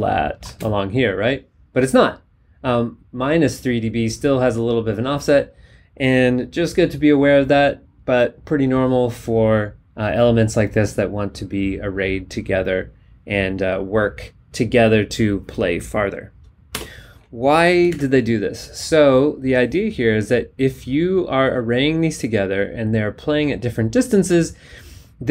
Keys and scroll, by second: 16.7 BackSpace, 17.9 alt+Tab.